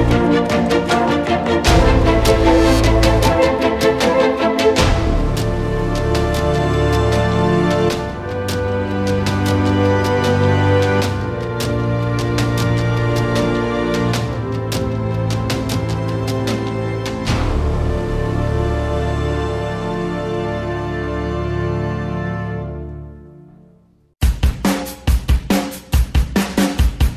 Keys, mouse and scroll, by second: 0.3 g, 1.1 scroll up 1, 1.3 click, 1.7 alt+d, 1.9 r, 2.1 g, 3.4 scroll down 1, 3.7 click, 3.8 g, 6.3 click, 6.5-6.9 scroll down 6, 6.9-7.9 drag, 8.4 click, 9.2-10.2 middle drag, 11.1-12.3 middle drag, 12.3-15.2 alt+drag, 15.2-15.7 scroll up 3, 15.7 click, 16.5-17.4 scroll up 3, 17.4 scroll up 1, 17.5 click, 18.1 KP_0, 19.4 middle click, 19.5 z, 19.7 middle click, 19.9 ctrl+s, 20.3 click, 20.5-20.9 scroll down 2, 20.9-21.6 scroll up 3, 21.6 alt+right click, 22.9 z, 23.3 middle click, 24.2 alt+right click, 25.6 alt+middle click, 26.3 z, 26.6 middle click, 26.8 ctrl+s.